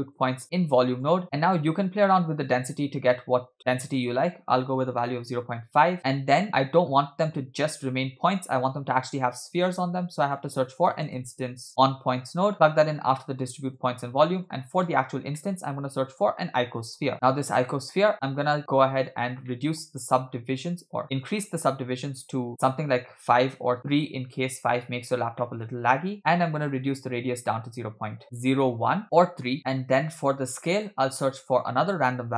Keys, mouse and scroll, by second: 1.2 click, 1.4-2.1 scroll up 4, 2.1 click, 3.6 middle click, 3.6-3.9 scroll up 1, 4.0-5.4 drag, 6.0 middle click, 6.0 scroll down 4, 6.4 scroll down 1, 6.4-7.6 scroll up 5, 7.6-9.0 scroll down 1, 9.7 shift+a, 11.7 BackSpace, 13.3-13.8 drag, 14.0 scroll down 2, 14.3 middle click, 14.7 click, 15.4 middle click, 15.6 shift+a, 17.1 BackSpace, 18.1-19.5 drag, 19.5-19.9 middle drag, 19.9-20.8 scroll up 4, 21.1-22.5 drag, 22.6-23.8 drag, 25.4 middle click, 25.7-26.2 scroll up 2, 26.2-28.2 drag, 30.4 scroll down 2, 30.6 shift+middle click, 30.9 shift+a.